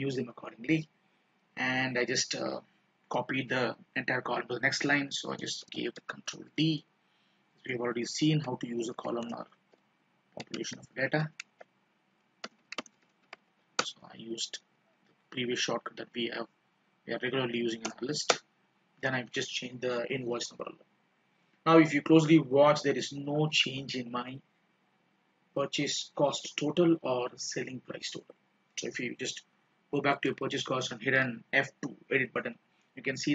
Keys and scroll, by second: 15.1 F2, 31.3 F2.